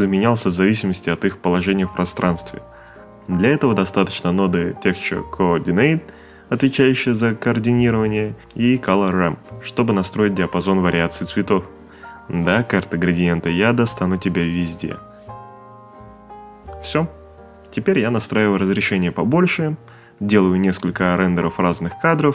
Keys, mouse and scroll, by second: 0.7 click, 2.8 click, 3.0 c, 3.7 click, 17.4-18.7 typing, 19.8 click.